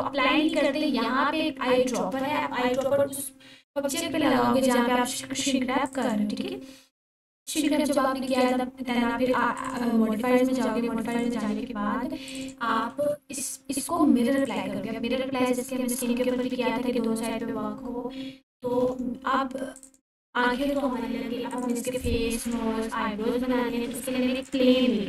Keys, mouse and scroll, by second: 2.2 1, 5.9 click, 12.9 g, 14.4 click, 18.5 shift+a, 19.8 click, 20.6 g, 20.8 z, 21.5 click, 22.3-22.6 alt+drag, 23.0-25.0 typing, 24.3 click.